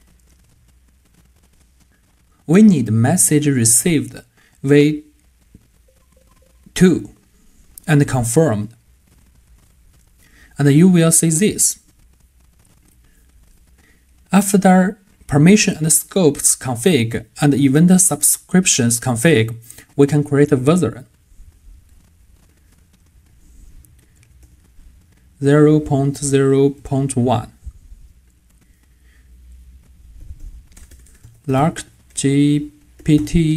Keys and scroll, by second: 25.4 typing.